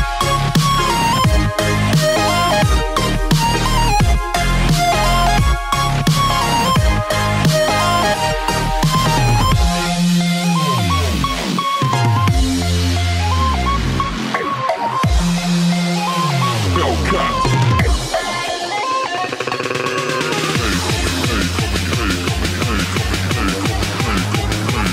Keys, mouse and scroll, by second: 0.2 alt+click, 0.4 alt+middle click, 0.6 click, 0.8 right click, 1.0 click, 1.2 ctrl+z, 1.3 click, 1.4 right click, 1.5 click, 1.7 Return, 1.8 click, 1.9 Return, 2.0 click, 2.2 Return, 2.2 click, 2.5 Return, 2.5 click, 2.6 Return, 2.9 click, 3.0 Return, 3.1 click, 3.3 Return, 3.4 click, 3.5 Return, 3.9 alt+click, 4.1 Return, 4.2 click, 4.3 Return, 4.5 alt+click, 4.6 alt+middle click, 4.8 alt+click, 4.9 alt+middle click, 5.4 alt+click, 5.6 alt+middle click, 5.7 alt+click, 6.4 alt+middle click, 6.6 alt+click, 6.7 alt+middle click, 6.9 alt+right click, 7.0 alt+middle click, 7.1 alt+right click, 7.1 alt+middle click, 7.1 alt+click, 7.2 alt+middle click, 7.2 alt+click, 7.3 alt+middle click, 7.4 alt+click, 7.8 alt+right click, 7.8 alt+middle click, 8.0 right click, 8.2 alt+middle click, 8.2 click, 8.3 Return, 8.5 click, 8.7 Return, 8.7-9.3 scroll down 3, 8.8 alt+click, 8.9 alt+right click, 9.2 alt+Num_Lock, 9.3 alt+right click, 9.4 alt+middle click, 9.6 alt+right click, 9.8 alt+click, 9.9 alt+right click, 10.2 click, 10.3 Return, 10.8 Num_Lock, 10.8 w, 10.9 click.